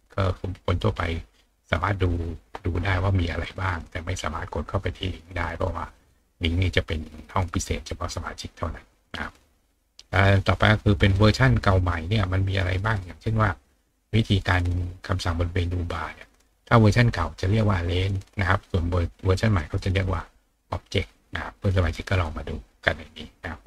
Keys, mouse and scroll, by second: 0.5 click, 2.1 click, 3.6 scroll down 1, 6.1 click, 10.9 click, 17.9 click, 20.3 click.